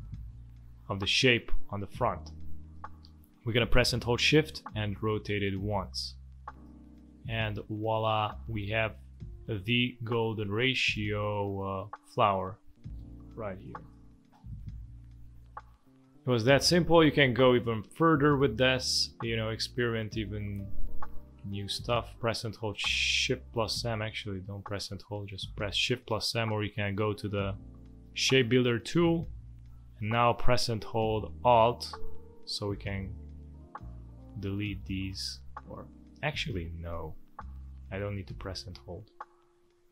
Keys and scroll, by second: 1.3 ctrl+z, 7.0 space, 8.0 space, 13.0 space, 15.0 z, 16.6 v, 17.2 space, 18.0 space, 21.9 space, 24.2 shift+m, 25.6 space, 29.7 space, 37.0 ctrl+z.